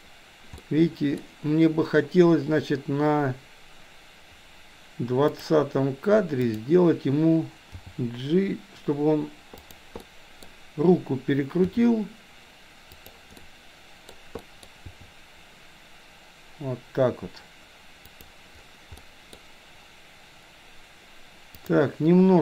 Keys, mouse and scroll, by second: 0.7-1.2 middle drag, 5.3 click, 6.5 click, 7.7 g, 10.1-10.5 middle drag, 11.7 r, 13.5 middle click, 14.1-14.5 scroll down 1, 14.5 scroll up 1, 14.6 middle click, 14.8 r, 19.0 middle click, 21.7 click.